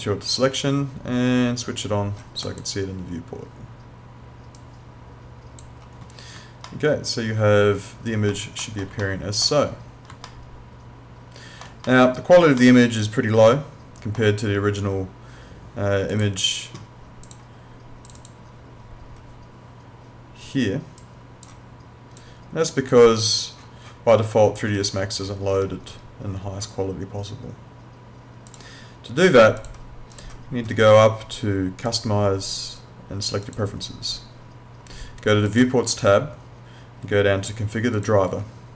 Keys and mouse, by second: 2.4 click, 6.7 alt+middle click, 9.0 alt+middle click, 10.3 alt+middle click, 12.6 alt+middle click, 16.1 click, 21.0 click, 28.5 click.